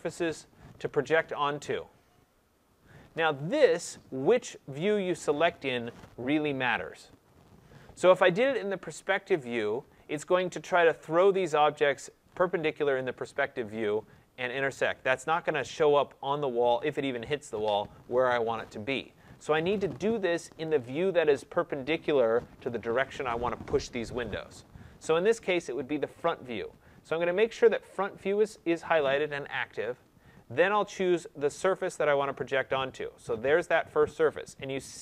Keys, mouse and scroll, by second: 26.2-31.3 drag, 31.9-35.0 drag.